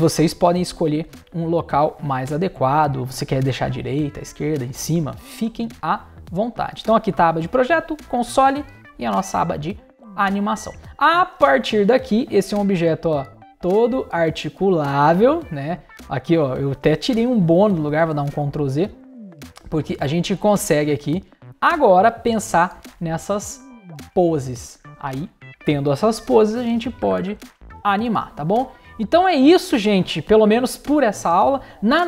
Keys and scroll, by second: 18.1 super+z, 26.4 space.